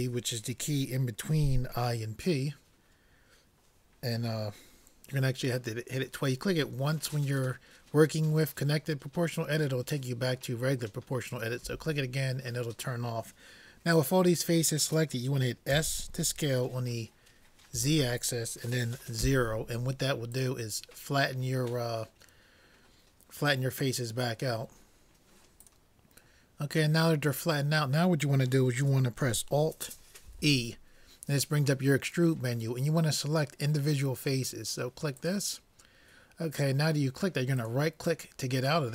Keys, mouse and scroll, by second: 11.6 o, 15.8 s, 30.3 alt+e.